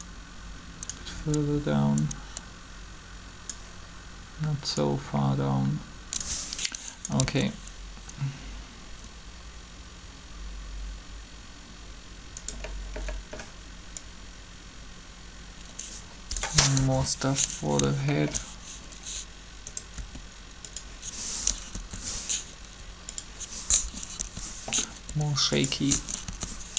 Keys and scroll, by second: 7.2 alt+a, 16.7 7, 20.0 r, 21.7 Up, 22.6 r, 24.2 Up, 25.1 r, 26.3 Up.